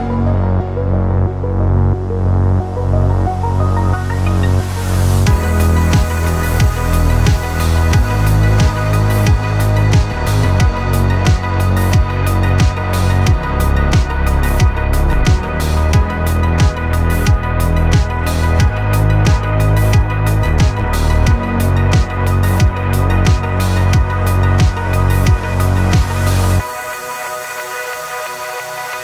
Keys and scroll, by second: 15.1 v, 20.6 v, 22.1 v.